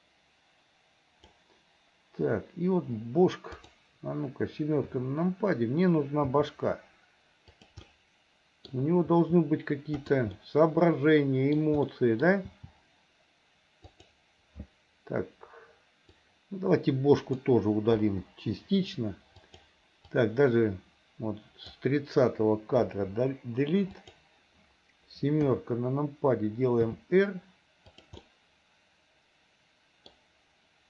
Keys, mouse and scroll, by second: 0.1-1.4 drag, 3.5 click, 4.9 KP_7, 6.4 r, 7.9 middle click, 9.1 r, 10.4-11.6 middle drag, 11.9 middle click, 12.5 r, 16.1-17.5 drag, 18.0 Delete, 19.5 click, 20.3-21.7 drag, 22.9 Delete, 24.1 click, 25.4 KP_7, 26.9 r, 28.2-30.1 middle drag.